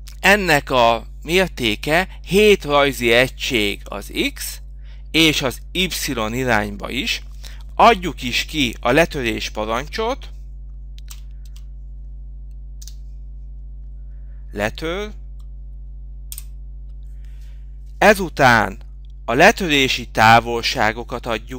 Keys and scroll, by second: 2.8 Return.